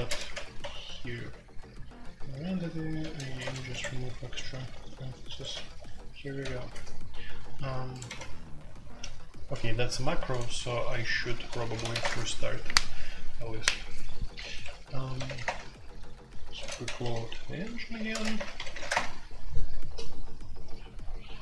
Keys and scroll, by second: 0.0-1.3 typing, 3.0-4.9 typing, 5.2 Escape, 5.4 F2, 6.4 ctrl+c, 6.5 ctrl+c, 8.0 q, 10.7-12.0 typing, 12.0 Return, 15.1 typing, 15.4 Return, 16.3-18.8 typing, 18.9 Return.